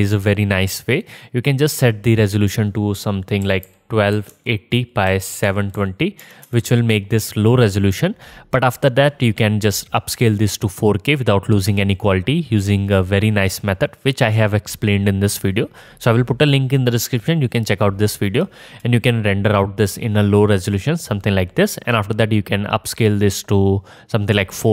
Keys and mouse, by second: 14.9 click, 14.9 middle click, 14.9 right click, 19.0 click, 19.0 middle click, 19.0 right click.